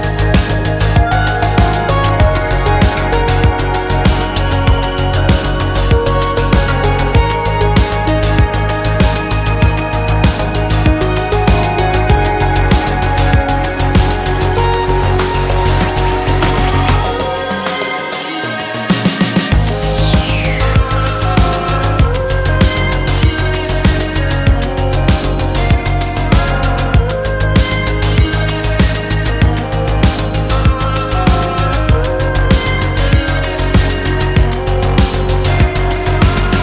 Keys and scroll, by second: 13.1 ctrl+j, 17.4 1, 17.9 1, 19.2 ctrl+m, 25.8 ctrl+u, 32.4 b, 32.9 x.